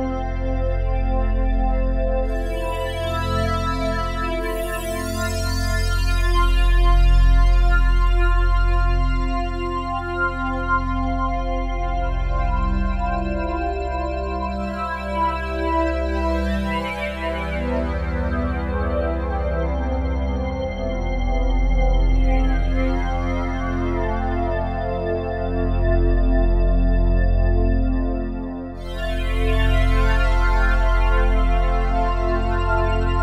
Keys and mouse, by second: 0.4 g, 0.8 x, 5.5-9.5 shift+drag, 9.5 typing, 10.6-17.0 alt+shift+drag, 17.0-17.3 typing, 20.1-21.1 shift+drag, 22.2 click, 23.3-23.7 typing, 25.3-28.7 shift+drag, 27.3-29.1 typing, 32.6-33.2 shift+drag.